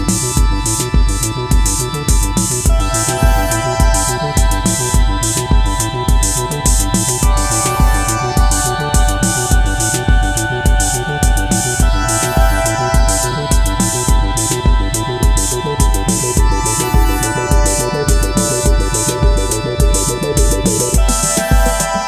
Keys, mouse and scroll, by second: 15.6 alt+click.